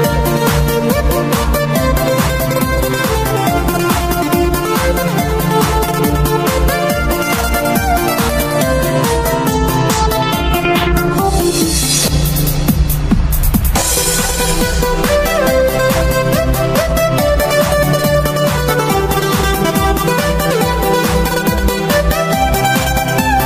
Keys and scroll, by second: 0.0-1.1 typing, 0.0 Delete, 0.1 Delete, 2.2 Return, 2.2-6.5 typing, 4.6 Tab, 9.4 p, 10.9 ctrl+shift+g, 11.2-12.6 typing, 14.1 ctrl+shift+p, 20.5 ctrl+shift+v, 21.3 p, 23.3 ctrl+shift+v.